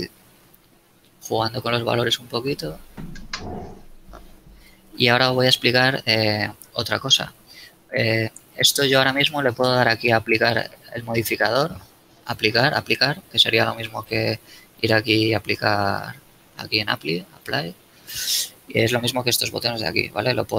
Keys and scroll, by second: 4.8 Tab, 6.2 a.